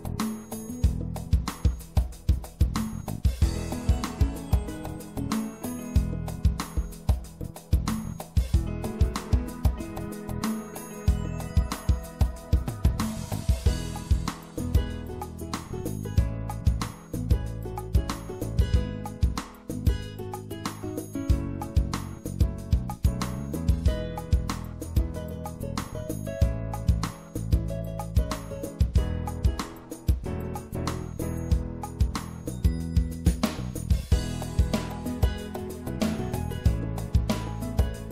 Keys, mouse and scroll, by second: 13.1-15.7 middle drag, 15.7 e, 16.6 middle click, 18.8-20.3 drag, 22.2 middle click, 22.7 middle click, 23.6 middle click, 26.3-27.4 middle drag, 29.2 click, 29.7 click, 33.2 w, 35.5-36.5 drag.